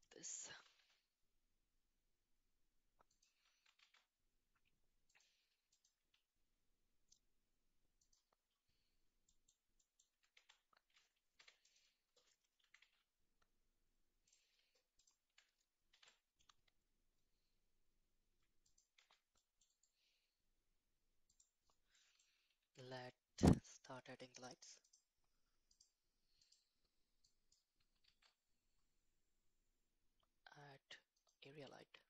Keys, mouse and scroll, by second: 0.7 r, 3.8 shift+a, 6.3 s, 10.3 Tab, 11.4 2, 11.6 click, 12.6 e, 15.9 ctrl+b, 19.0 Tab, 19.4 middle click, 19.8-21.4 right drag, 21.9-22.5 middle drag, 22.8 shift+a, 25.7 click, 28.0 shift+a.